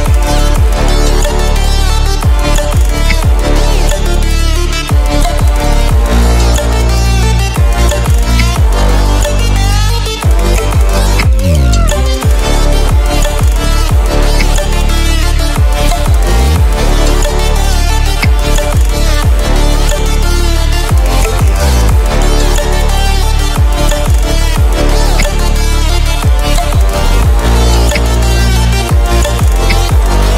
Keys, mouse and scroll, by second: 3.0 v, 3.6 click, 7.4 click, 8.3 Delete, 9.7 click, 11.1 a, 13.0 click, 14.3 Delete, 15.8 click, 18.2 Delete, 19.9 click, 21.2 shift+click, 22.2 right click, 23.4 click, 25.1 v, 25.8-26.8 drag, 27.9 i, 28.5 click, 29.6 v, 30.0 click.